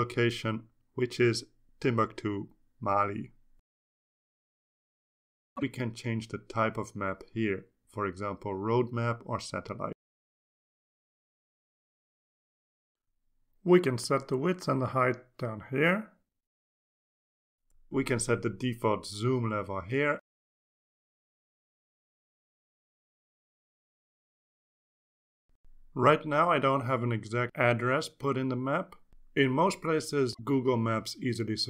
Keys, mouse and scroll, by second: 0.3-3.7 typing, 5.7 click, 9.4 click, 10.2 click, 11.7 click, 13.2 click, 13.8 click, 15.4 5, 16.0 Return, 17.4 click, 18.2 BackSpace, 18.3 2, 19.7 Return, 20.7 click, 23.0 7, 23.6 Left, 23.7 BackSpace, 24.0 Return.